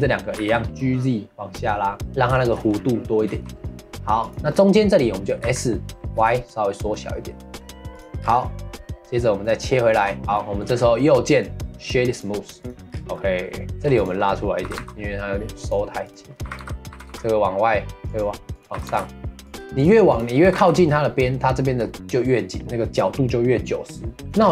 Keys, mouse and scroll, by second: 0.3 g, 2.1-3.2 middle drag, 3.2 3, 4.2 click, 8.2 scroll down 1, 8.4-10.0 middle drag, 10.0 Tab, 10.2 scroll down 1, 10.3-10.7 middle drag, 10.7 scroll up 3, 10.9-11.3 middle drag, 11.3 right click, 12.6 click, 12.9 scroll down 1, 13.1-13.7 middle drag, 13.7 2, 13.9 click, 16.0 click, 18.5 click, 19.7 click, 20.1 click, 24.2 click, 24.4 scroll up 5.